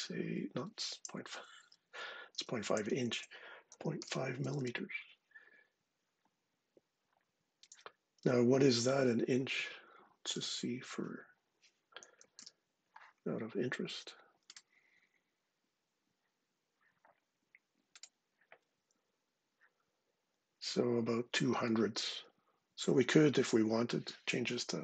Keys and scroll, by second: 1.7 Left, 1.9 Left, 2.5 shift+Right, 2.7 shift+Right, 2.8 shift+Right, 3.2-4.8 typing, 8.4 super+Tab, 9.3 super+Tab, 10.1 super+Tab, 11.7-12.6 typing, 22.6 super+Tab, 24.5-24.8 typing.